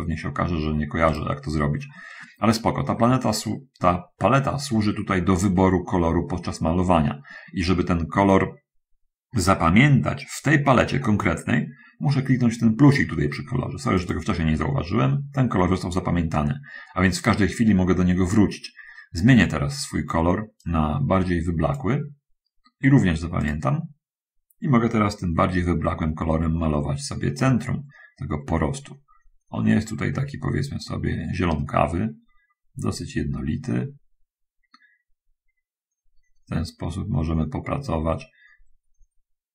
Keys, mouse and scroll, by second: 0.2 click, 1.4 click, 1.8 middle click, 14.0 click, 20.9-22.2 drag, 23.8 click, 25.8-39.5 drag.